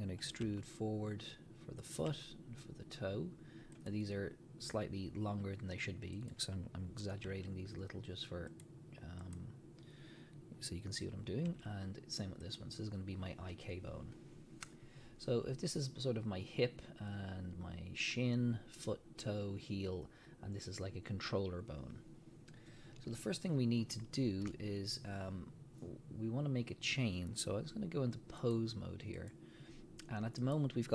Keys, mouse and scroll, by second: 0.4 e, 2.0 click, 2.1 e, 3.9 click, 6.2 click, 7.3 e, 8.6 click, 9.2 click, 11.5 e, 12.6 click, 23.8 scroll down 1, 24.2-28.4 shift+middle drag, 28.4-30.6 drag.